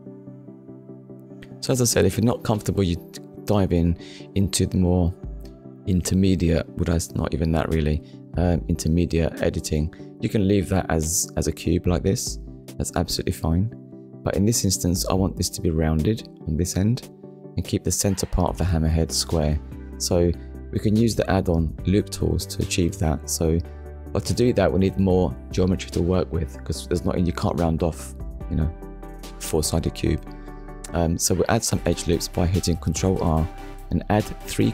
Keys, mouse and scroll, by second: 0.2 middle click, 4.3 shift+middle click, 5.1-5.6 scroll up 1, 6.9 Tab, 8.8 Tab, 10.0 click, 10.5 click, 10.9 middle click, 15.7 middle click, 20.8 ctrl+r, 22.0-22.4 scroll up 1, 22.8-23.2 scroll up 1, 23.7 click, 24.6 right click, 25.3 middle click, 26.2 ctrl+r, 27.2-27.6 scroll up 1, 27.8-28.2 scroll up 1, 28.3 click, 29.3 right click, 29.8 middle click, 33.5 click, 34.5 middle click.